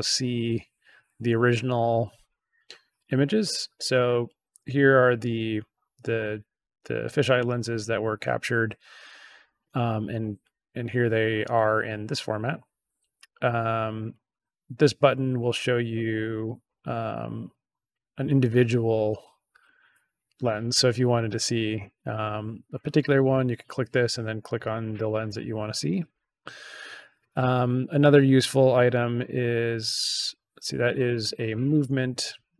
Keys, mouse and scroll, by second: 13.2 click, 14.0 click, 16.6 click, 17.0 click, 19.6 click, 20.6 click, 21.0 click, 21.6 click, 22.6 click, 24.4 click, 24.7 click, 25.0 click, 26.1 click, 28.8 click, 29.9 click, 31.0 click, 31.6 click.